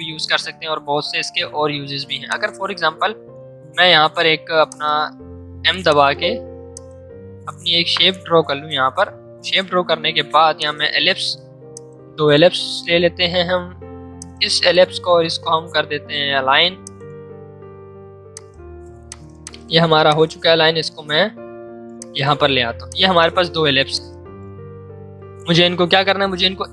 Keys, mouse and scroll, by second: 2.2 click, 3.1 ctrl+z, 4.6 click, 5.1 m, 5.8 click, 6.1 m, 6.7 click, 7.8 space, 9.7 v, 10.5 click, 10.9 l, 11.7-13.4 shift+drag, 13.4 v, 14.1-19.9 drag, 20.0 alt+click, 23.7 space, 23.9 click.